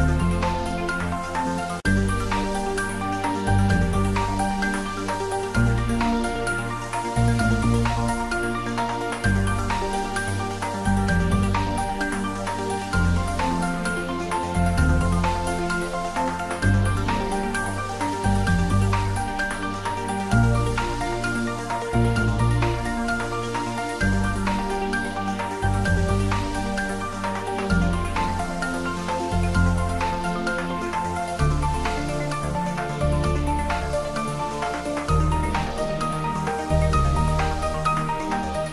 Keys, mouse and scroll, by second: 1.8 scroll down 1, 2.6 a, 3.0 h, 3.6 shift+a, 4.3 click, 4.6-5.0 scroll up 1, 5.0 click, 5.9-9.1 typing, 6.6 click, 7.2 click, 7.7 click, 8.2 click, 8.6 click, 8.9 click, 9.4 click, 9.6 scroll down 1, 9.8 middle click, 10.4 click, 11.3 scroll up 1, 12.8 shift+d, 12.9 x, 14.7 click, 15.3 shift+click, 15.9 shift+d, 16.1 r, 18.6 click, 18.8 scroll down 1, 19.2-21.3 middle drag, 21.3 shift+click, 22.3-24.8 typing, 23.7 click, 24.0 ctrl+z, 24.5 click, 25.8 click, 26.1-27.5 middle drag, 27.5 click, 27.7 scroll up 1, 28.0 ctrl+z, 29.4 g, 29.5 x, 30.2 click, 30.7 shift+click, 31.1 shift+d, 31.3 r, 31.5 9, 31.7 0, 31.9 click, 32.1 scroll down 1, 32.4 middle click, 33.3-34.1 scroll up 1, 34.3 shift+click, 36.0 ctrl+j, 36.5 s, 36.6 z, 37.3 click, 38.2-38.7 scroll down 1.